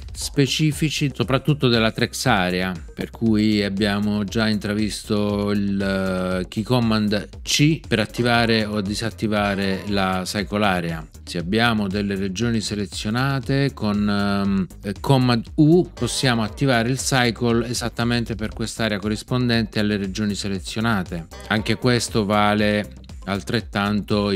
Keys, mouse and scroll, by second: 8.1 c, 15.9 super+u, 21.3 c.